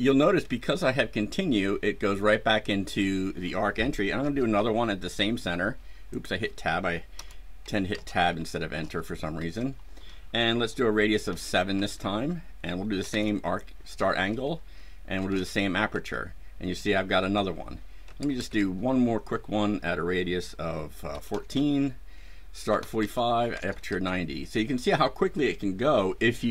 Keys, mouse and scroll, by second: 4.1 KP_0, 4.5 Tab, 6.1 click, 7.1 Return, 7.8 KP_0, 8.3 KP_Enter, 8.7 KP_0, 9.3 KP_Enter, 11.2 KP_7, 11.7 KP_Enter, 12.9 KP_4, 13.0 KP_5, 14.0 KP_Enter, 15.1 KP_9, 15.2 KP_0, 15.9 KP_Enter, 18.0 KP_Enter, 21.0 KP_1, 21.2 KP_4, 21.5 KP_Enter, 22.6 KP_4, 22.7 KP_5, 22.9 KP_Enter, 23.3 KP_9, 23.4 KP_0, 23.8 KP_Enter.